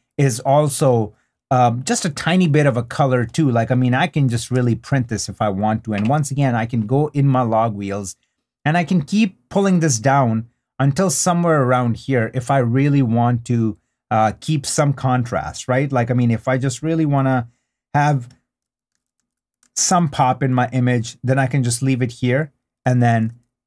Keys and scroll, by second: 4.4 super+d, 20.0 super+d.